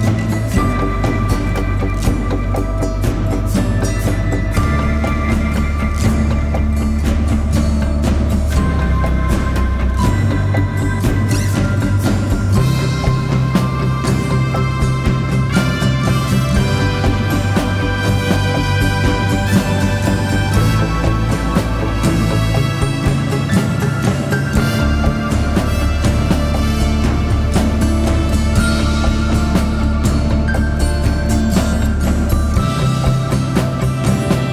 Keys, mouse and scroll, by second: 0.5 double click, 1.2 typing, 1.6 double click, 16.6 double click, 19.5 right click, 21.8 [, 22.0 [.